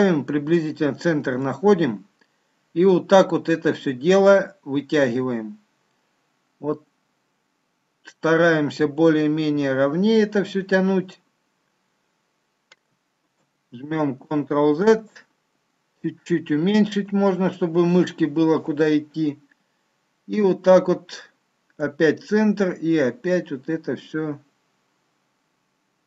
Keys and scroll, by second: 13.4 ctrl+z.